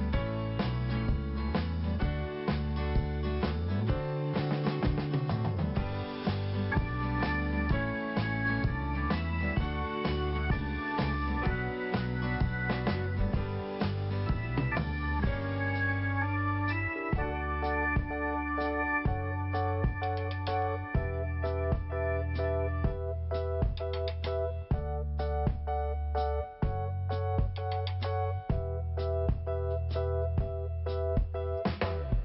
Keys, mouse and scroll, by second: 6.4 click, 7.4 click, 13.0 scroll down 1, 13.8 scroll up 1, 17.8 scroll down 1, 21.6 click, 21.6 click, 22.7 click, 22.8 click, 23.4 click, 23.5 click, 23.7 click, 24.7 click, 24.8 click, 26.5 scroll down 1, 27.7 click, 28.5 click, 29.1 click, 29.5 click, 30.3 click, 31.2 click, 31.3 click, 31.7 click.